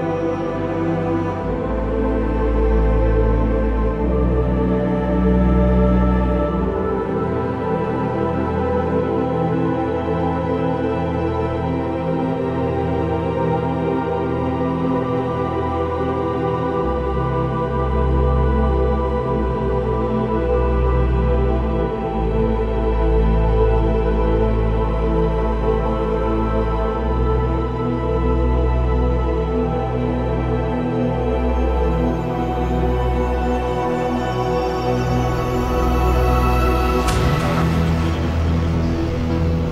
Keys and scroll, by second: 0.1 ctrl+j, 0.4 v, 1.3 ctrl+v, 1.5 ctrl+t, 6.2 v, 6.5 ctrl+d, 15.8 ctrl+z, 15.8 typing, 16.4 ctrl+t, 19.5 ctrl+t, 21.2 ctrl+z, 21.4 ctrl+t, 23.1 ctrl+e, 23.8 ctrl+alt+e, 24.1 ctrl+t, 26.3 ctrl+d, 26.5 v, 26.8 ctrl+z, 26.9 ctrl+o, 27.3 ctrl+d, 27.4 v, 27.8 ctrl+a, 27.9 ctrl+c, 28.3 ctrl+v, 29.1 ctrl+v, 29.1 ctrl+t, 32.2 ctrl+d, 32.6 v, 33.1 ctrl+t, 37.1 ctrl+t, 39.1 ctrl+t.